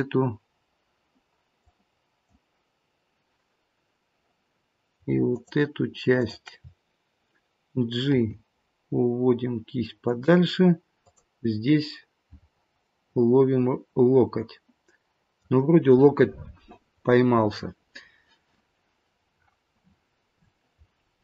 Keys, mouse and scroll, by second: 4.1 click, 5.3 shift+click, 6.2 shift+click, 8.1 g, 11.0 click, 12.9 middle click, 19.8-20.7 scroll down 7, 20.7-21.2 scroll up 1.